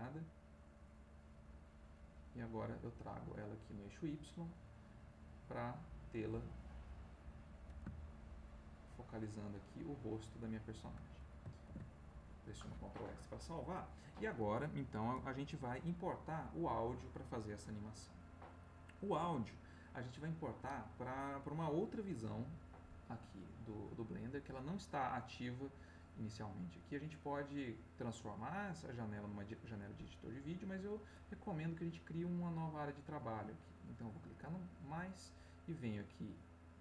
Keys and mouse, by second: 0.9-3.5 drag, 3.9-5.8 drag, 6.6-11.2 drag, 11.8 ctrl+s, 28.3 click, 34.4 click.